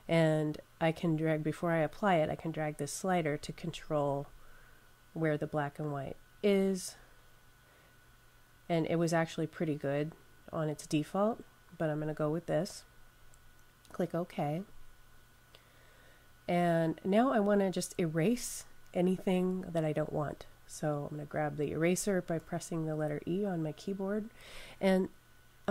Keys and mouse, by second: 0.6 click, 14.4 click, 22.2 e.